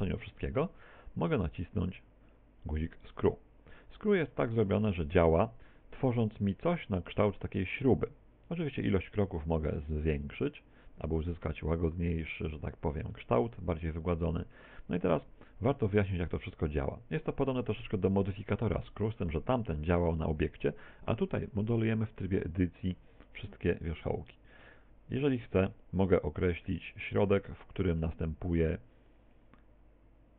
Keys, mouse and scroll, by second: 4.7 click, 6.8 middle click, 10.0 click, 13.2 middle click, 15.2 middle click, 17.8 middle click, 18.8 shift+middle click, 21.0 middle click, 24.6 click, 27.5 click.